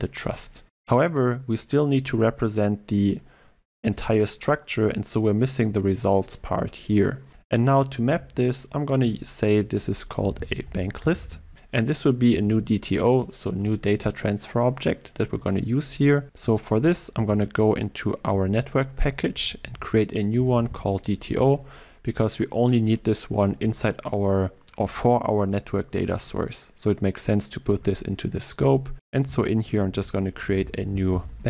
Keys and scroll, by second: 16.9 alt+1, 17.2 Up, 19.8 alt+Insert, 23.5 Up, 24.1 Down, 25.5 Up, 27.7 alt+Insert.